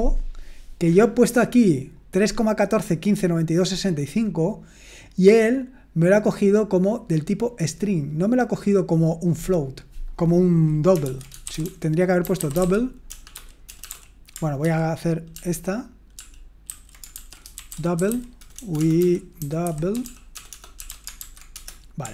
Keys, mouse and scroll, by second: 11.2-13.9 typing, 14.6 ctrl+p, 15.3 ctrl+p, 16.2 ctrl+p, 16.7 ctrl+a, 17.1-22.1 typing.